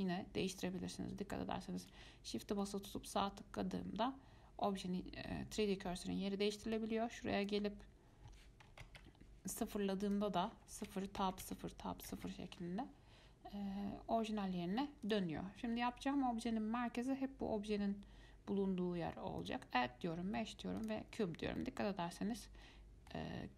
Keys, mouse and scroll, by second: 2.8-5.8 shift+right drag, 7.0-10.0 drag, 10.3-13.3 drag, 15.2 click, 19.6-21.8 drag, 21.8-23.5 middle drag.